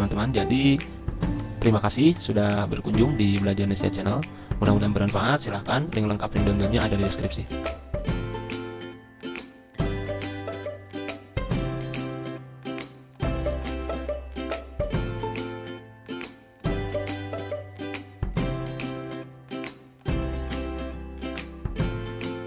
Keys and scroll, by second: 2.9 ctrl+z.